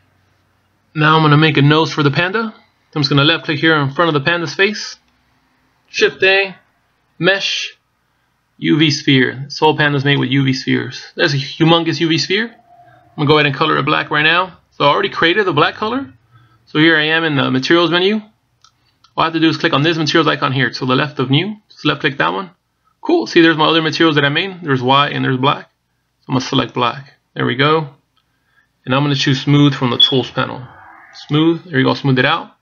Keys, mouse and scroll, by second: 4.7 click, 6.8 shift+a, 22.9 click, 31.9 click.